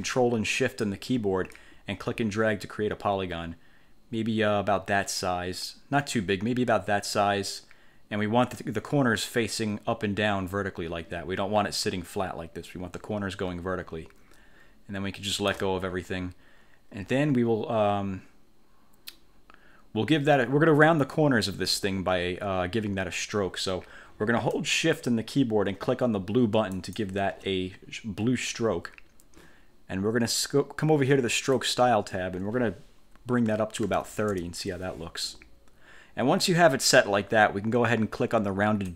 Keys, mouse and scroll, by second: 1.7-15.9 ctrl+shift+drag, 26.9 shift+click, 31.7 click, 33.7-34.6 typing.